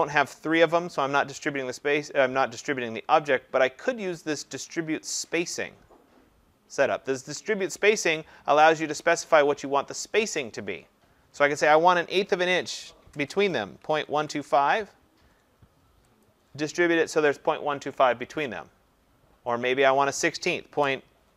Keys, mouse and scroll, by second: 8.6 click, 10.4 click, 12.3-14.3 typing, 20.4 click, 20.8-21.3 typing.